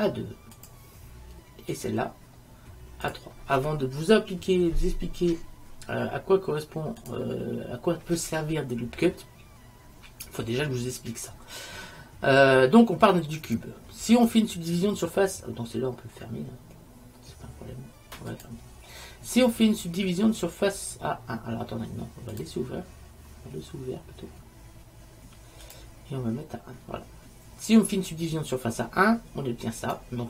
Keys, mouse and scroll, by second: 0.7-2.2 drag, 1.8 right click, 2.8 right click, 3.5-6.0 drag, 7.2-8.8 drag, 13.5-16.1 right drag, 18.4-20.0 drag, 22.4-24.2 drag, 29.9-30.2 right drag.